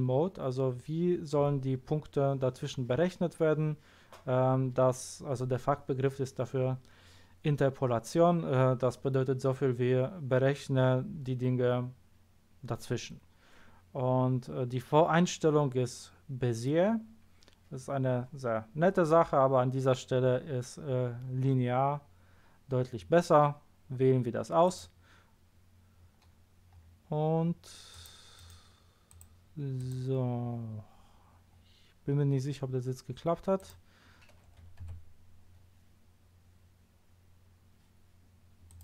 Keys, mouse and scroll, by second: 24.6 click, 26.7 scroll up 1, 26.9 scroll down 1, 27.9 click, 28.3 right click, 29.1 click, 29.7 click, 33.5 click, 35.7 a, 38.7 click.